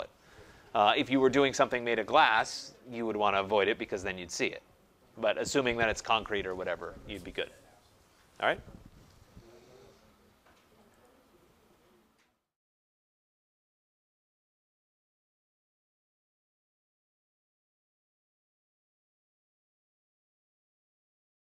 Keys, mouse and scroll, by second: 11.0 click.